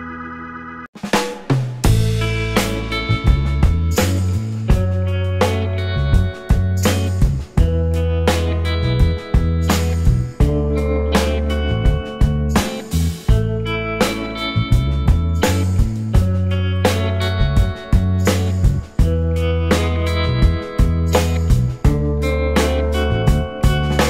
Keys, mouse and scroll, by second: 0.1 alt+scroll up 2, 0.7 scroll up 1, 1.0 shift+click, 3.9 scroll up 1, 4.0 alt+click, 4.8 right click, 5.6 alt+click, 7.6 shift+click, 8.0 shift+right click, 11.3 right click, 12.1-12.5 scroll down 1, 12.5 alt+click, 13.3 scroll down 1, 13.7 alt+middle click, 14.0 alt+click, 14.4 alt+middle click, 14.8-15.5 alt+scroll up 3, 15.8 alt+middle click, 16.7 double click, 17.0 scroll up 1, 17.3 shift+click, 18.9 scroll up 1, 19.7 right click, 21.1 alt+click, 22.5 shift+click, 23.3 shift+right click.